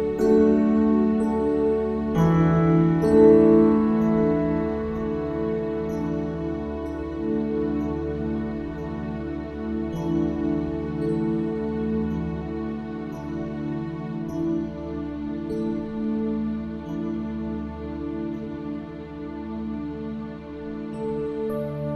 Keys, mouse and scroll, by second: 0.8 middle click, 2.0 click, 2.6 middle click, 2.8 alt+s, 3.8-4.8 drag, 4.8 right click, 5.0 ctrl+z, 5.4 KP_1, 6.3 middle click, 7.5 middle click, 8.6 middle click, 9.2 middle click, 9.8 KP_1, 10.3 click, 11.4 s, 12.0 click, 12.7-15.9 drag, 16.5 ctrl+s, 17.3 middle click, 17.9 Tab, 18.2 middle click, 18.4 click, 19.0 l, 19.4 ctrl+s, 21.6 click.